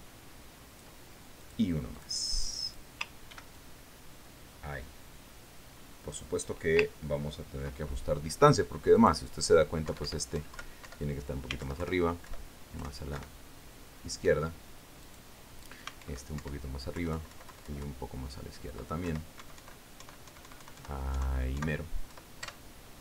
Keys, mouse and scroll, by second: 2.9 click, 3.4 click, 4.8 ctrl+d, 5.0-8.0 ctrl+drag, 8.3-9.0 ctrl+scroll up 4, 10.4 click, 11.3 Up, 11.8 Down, 12.3 Up, 13.1 alt+Left, 14.6 alt+Right, 16.5 click, 17.5 alt+Up, 18.4 alt+Left, 20.9 alt+Right.